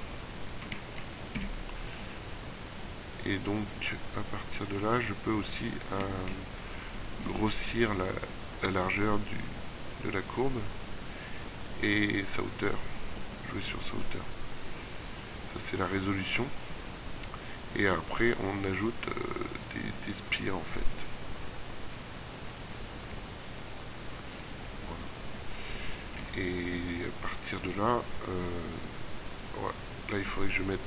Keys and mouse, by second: 1.4 KP_7, 9.1-13.3 middle drag, 25.3 middle click.